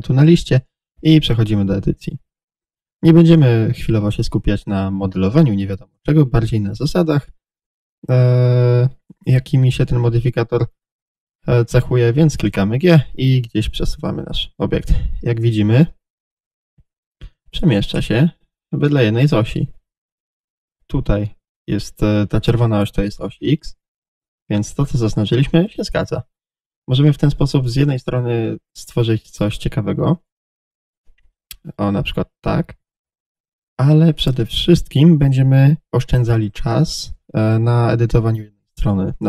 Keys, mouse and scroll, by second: 8.3-17.3 middle drag, 12.5 g, 17.3 click, 17.6-27.7 middle drag, 25.6 g, 27.7 click, 28.0-30.3 middle drag, 29.7 g, 30.3 click, 30.9 click, 31.4 click, 31.8-34.5 middle drag, 33.2 g, 34.5 click, 36.3-39.2 middle drag, 36.9-37.3 scroll down 1.